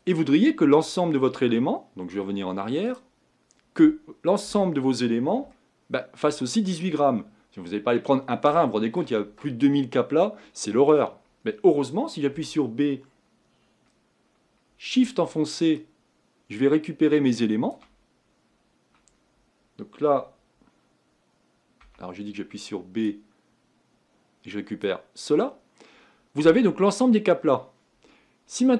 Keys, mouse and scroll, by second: 0.0-3.0 scroll down 4, 3.0-4.5 drag, 4.5 KP_1, 5.6 shift+middle click, 6.5-7.1 scroll up 3, 7.1-8.2 scroll down 1, 8.2-8.7 scroll down 2, 8.7-17.8 shift+middle drag.